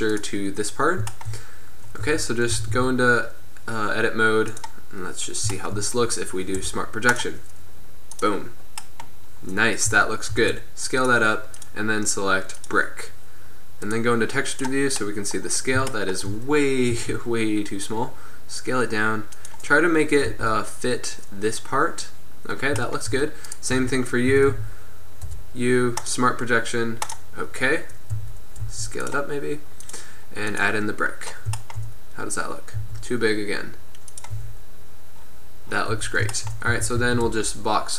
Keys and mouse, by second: 2.1 Tab, 2.6 a, 2.8 a, 5.9 click, 6.6 u, 10.0 a, 10.4 s, 11.6-12.7 drag, 13.2 middle click, 13.3 click, 13.4-14.0 middle drag, 14.7-15.5 middle drag, 17.1 s, 19.9 middle drag, 20.5 Tab, 23.9 Tab, 24.4 a, 24.5 a, 25.3 u, 28.2 a, 28.8 s, 29.9-31.2 drag, 31.2-31.9 middle drag, 33.0 s, 33.4 click, 34.5 Tab, 36.1 Tab, 36.9 a, 37.1 z, 37.3 b.